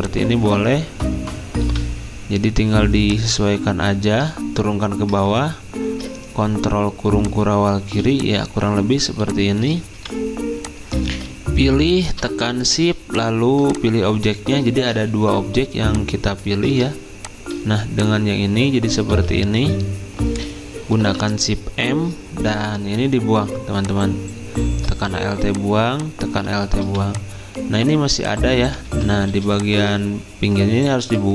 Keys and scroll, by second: 5.3 ctrl+[, 7.9 z, 9.2 v, 11.1 ctrl+z, 14.9 Escape, 16.5 ctrl+z, 19.1 ctrl+z, 20.9 m, 28.9 ctrl+z.